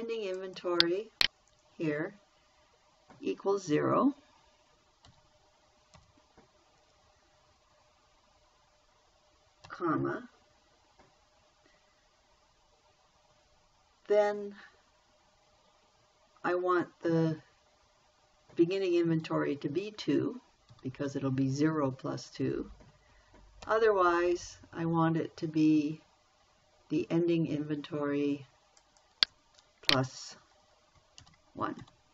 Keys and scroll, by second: 5.5 =, 6.4 0, 10.1 ,, 21.1 2, 24.0 ,, 31.6 shift+=.